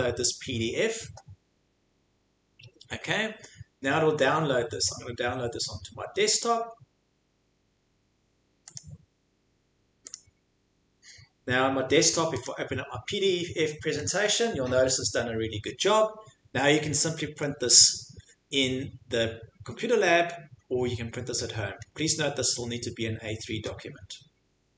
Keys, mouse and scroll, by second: 7.1 scroll down 5, 7.8-8.3 scroll down 7, 8.8 click, 9.4 scroll, 10.1 click, 12.4 click, 14.0-14.7 scroll, 14.9 scroll down 10, 15.7 scroll, 16.9 scroll, 17.6-18.2 scroll, 19.0 scroll, 20.0-20.8 scroll, 21.8-22.6 scroll.